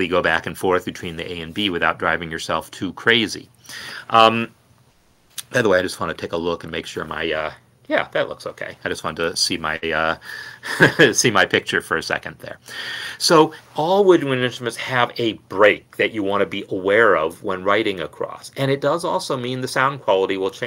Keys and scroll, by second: 10.3 super+].